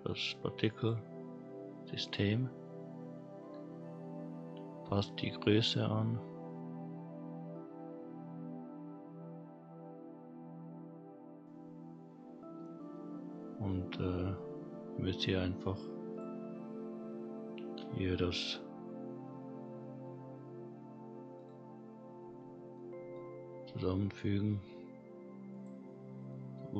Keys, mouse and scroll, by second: 2.8-3.5 scroll down 3, 3.5-5.2 scroll up 2, 5.8 click, 8.7 click, 12.9-13.3 middle drag, 13.5-14.0 scroll down 1, 14.0-14.3 middle drag, 14.3-14.7 scroll up 2, 14.7 scroll down 1, 14.9-15.9 scroll up 1, 16.1 click, 21.3 click, 22.7 middle click, 23.5 g, 25.9-26.3 scroll up 2, 26.3-26.7 middle drag.